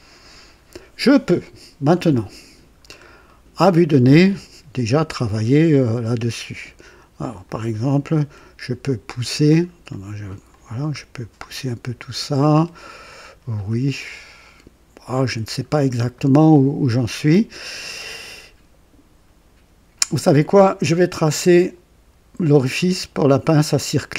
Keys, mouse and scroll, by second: 2.7-3.0 scroll down 1, 3.2-3.9 right drag, 7.2 click, 10.4-15.4 drag, 15.6-16.0 scroll up 2, 16.1-16.9 right drag, 21.3 click, 23.3 click.